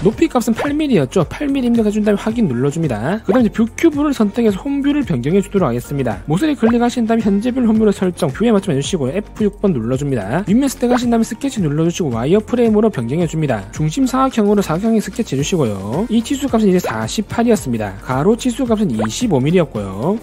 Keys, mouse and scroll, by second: 0.8 click, 2.8 click, 4.1 click, 5.0 click, 6.1 click, 6.6 right click, 8.2 click, 9.2 click, 9.7 click, 11.4 click, 12.5 scroll up 2, 13.0 alt+q, 13.1 middle click, 13.5 alt+w, 13.8 middle click, 14.6 4, 15.5 click, 16.4 click, 16.8 click, 17.3 4, 18.5 click, 19.0 click, 19.2-20.1 typing.